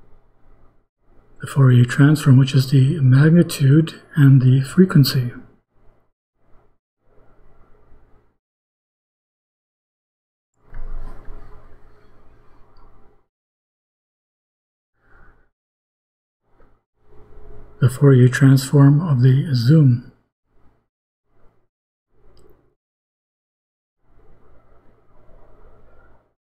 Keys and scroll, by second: 5.3 BackSpace, 11.9 ;, 18.5 BackSpace.